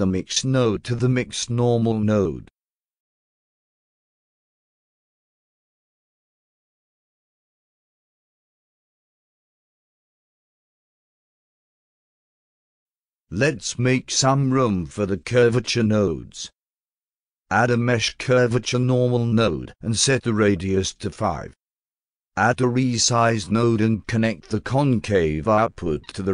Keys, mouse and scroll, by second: 0.4 click, 2.8 click, 4.1-6.1 alt+drag, 6.2 alt+drag, 6.7-7.6 alt+drag, 7.9-8.2 alt+drag, 8.4 alt+click, 8.9-10.4 alt+drag, 10.5-10.9 alt+middle drag, 11.0-11.7 alt+drag, 11.9 alt+middle drag, 12.2 alt+right click, 13.1-14.2 drag, 14.9-16.5 drag, 17.2 click, 18.4-19.5 drag, 20.1 click, 20.3 5, 21.4 0, 22.3 click, 23.9 click.